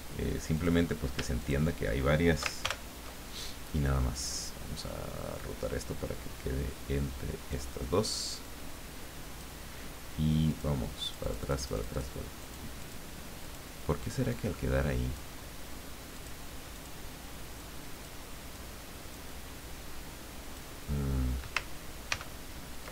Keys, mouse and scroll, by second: 0.5 click, 1.4 shift+click, 2.6 ctrl+shift+g, 4.1 click, 5.3-7.7 drag, 8.4-10.2 drag, 10.5 click, 11.0-12.2 drag, 12.4 click, 12.8 click, 13.4 click, 14.3-15.7 drag, 16.2 click, 16.7 click, 17.6 click, 18.6-20.7 drag, 22.1 ctrl+g.